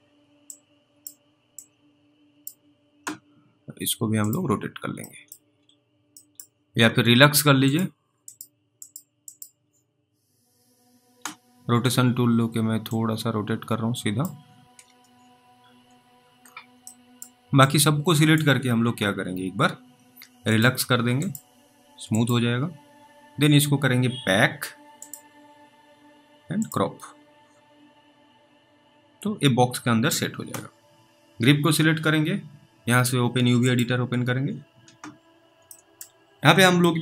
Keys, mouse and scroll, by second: 0.8 click, 1.9 click, 5.3 middle click, 5.5 scroll up 3, 6.5 middle click, 6.6 middle click, 6.6 scroll up 2, 7.7 click, 13.2 click, 14.6 ctrl+z, 16.4-17.0 scroll down 1, 17.1 middle click, 18.0 click, 31.0 middle click, 31.0 click, 33.6 click, 36.3 alt+middle click, 36.3-36.7 scroll up 1.